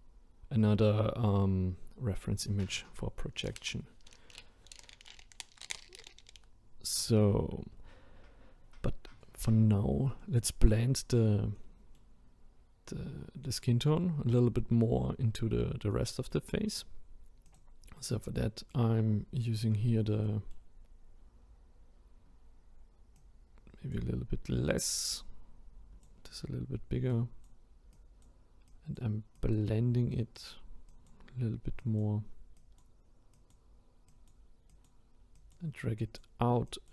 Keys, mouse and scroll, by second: 10.2-11.0 middle drag, 11.0-11.5 scroll down 2, 11.5-14.5 middle drag, 15.9-16.7 middle drag, 16.7-17.5 scroll up 1, 17.5-18.3 drag, 18.3-19.8 middle drag, 19.8-20.2 scroll up 2, 20.2-20.8 middle drag, 20.8-23.2 scroll down 1, 23.2-36.9 drag.